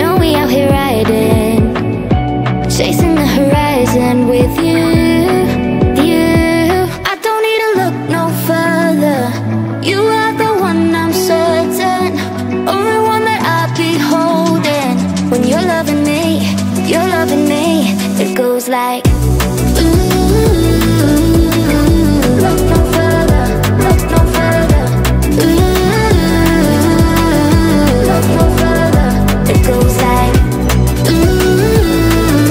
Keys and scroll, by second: 0.4 7, 1.4 Return, 1.6 0, 2.4 Return, 2.8 0, 3.8 Return, 5.4 1, 5.6 0, 6.0 Return, 6.3 1, 6.8 Return, 7.5-23.5 typing, 8.5 Return, 12.9 Return, 13.8 Return, 15.0 Return, 16.1 Return, 19.0 Return, 24.6-28.2 typing, 24.8 Return, 26.0 Return, 27.1 Return, 28.5 Return, 29.5 3, 29.8 1.